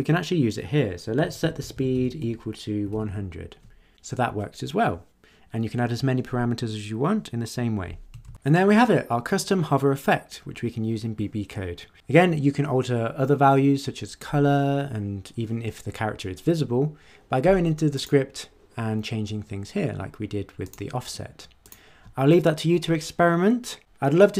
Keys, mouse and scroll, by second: 0.9-3.4 typing, 8.2 ctrl+s, 17.9 click, 20.6 click, 21.6 click.